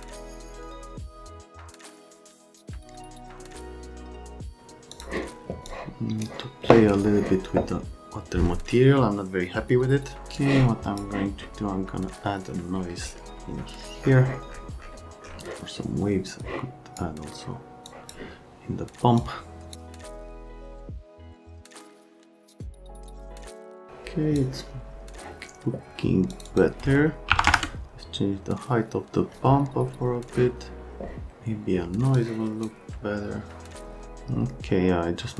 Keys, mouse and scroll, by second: 1.0 click, 1.9 click, 3.6 click, 4.9 click, 5.6 click, 10.3 click, 16.4 click, 17.9 click, 19.2 click, 20.4 click, 21.6 right click, 23.0 click, 23.8 click, 26.3 click, 26.5 click, 27.3 KP_1, 27.4 KP_0, 27.5 KP_Enter, 32.1 click.